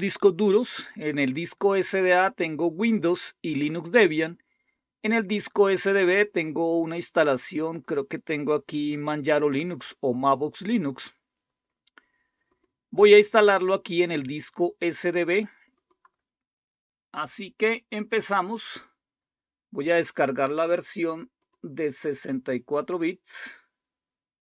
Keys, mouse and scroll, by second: 7.8-10.1 drag, 12.5 click, 14.0 click, 15.5 click, 18.6 click, 21.3 click.